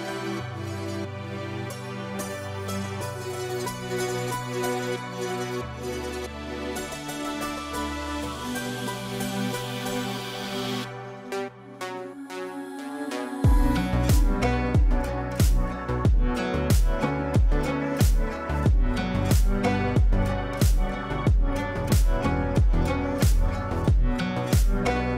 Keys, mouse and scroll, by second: 2.1-3.0 drag, 5.5 ctrl+shift+a, 7.0 click, 10.8 scroll down 1, 13.1 ctrl+g, 15.5 click, 16.4 ctrl+right click, 19.1-19.7 drag.